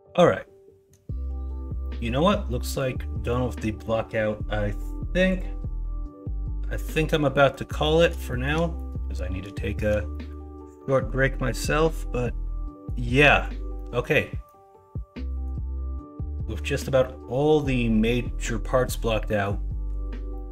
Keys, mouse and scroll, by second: 0.1-0.9 middle drag, 1.8 middle drag, 2.5 middle drag, 3.3 middle drag, 7.3 middle click, 7.8 middle drag, 8.3 shift+middle drag, 8.7 middle drag, 9.6 shift+middle drag, 10.1 middle click, 10.8 middle drag, 11.3 middle drag, 11.8-12.8 middle drag, 13.1 middle drag, 13.7 middle drag, 14.4-15.4 middle drag, 19.2 middle drag, 20.3 middle drag.